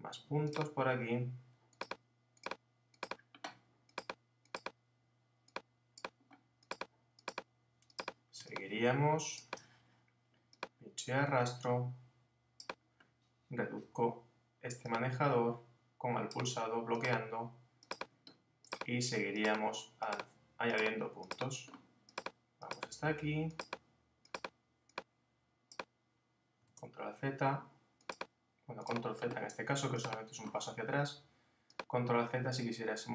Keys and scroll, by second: 26.7 super+z.